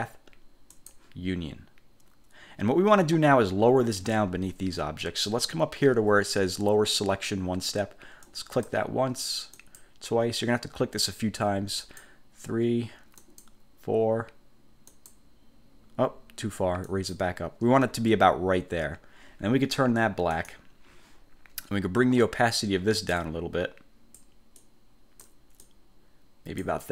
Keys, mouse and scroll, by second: 0.8 click, 8.4 click, 9.7 click, 12.0 click, 13.3 click, 15.0 click, 17.0 click, 20.4 click, 23.3-24.5 drag, 24.7 click, 25.7-26.9 drag.